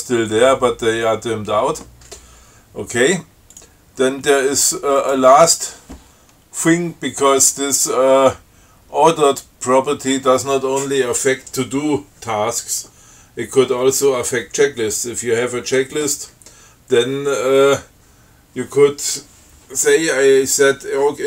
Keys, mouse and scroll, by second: 3.8 click, 5.3 click, 5.6 q.